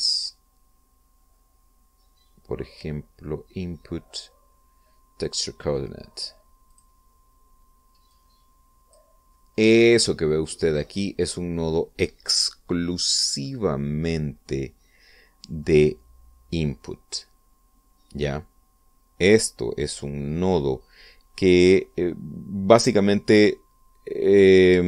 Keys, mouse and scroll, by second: 5.9 click, 7.4 click, 8.8-9.8 drag, 11.1-11.7 middle drag.